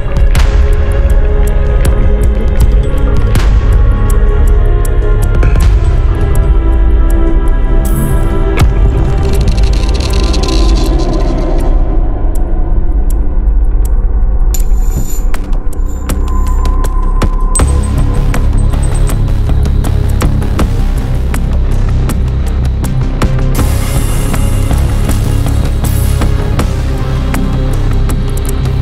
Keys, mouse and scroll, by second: 0.1 click, 1.4 scroll down 2, 2.1 scroll up 2, 3.4 scroll down 2, 7.9 click, 9.2 click, 11.1 2, 12.0 click, 14.7 click, 16.0 click, 17.2 click, 20.4 click, 21.5 click, 22.9 1, 23.6 0, 24.5 click, 27.9 scroll up 2, 28.4 Escape.